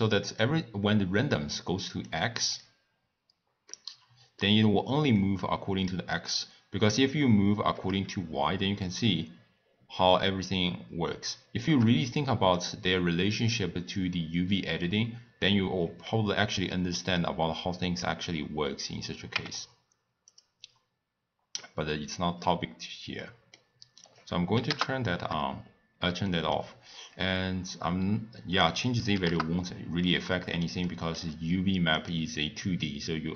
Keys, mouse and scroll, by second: 3.8-6.9 middle drag, 6.9-9.1 drag, 12.7 click, 14.1 click, 16.7-19.3 middle drag, 19.3 Tab, 20.4 click, 21.6-24.7 middle drag, 24.7-30.1 drag, 30.1-32.0 middle drag, 32.0 click.